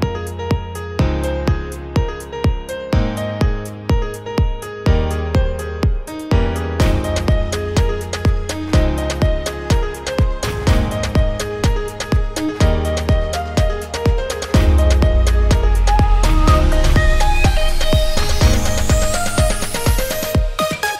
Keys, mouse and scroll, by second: 0.0-1.5 typing, 0.5 click, 0.9 click, 2.1 click, 2.4 click, 3.1-4.9 typing, 3.8 click, 4.2 click, 4.5 click, 4.9 click, 5.3 click, 6.0 click, 6.5-10.3 typing, 6.8 click, 7.1 click, 7.8 click, 8.6 click, 9.1 click, 9.5 click, 10.2 click, 10.8 click, 12.0 e, 12.3 click, 12.3 e, 12.6 e, 12.9 e, 13.1 click, 13.4 click, 13.9-16.6 typing, 14.7 click, 14.9 click, 15.9 click, 17.0 click, 17.4 click, 17.7 click, 17.8 e, 18.0 e, 19.1-20.5 typing, 19.2 click, 19.7 click, 20.0 click, 20.2 click, 20.5 click.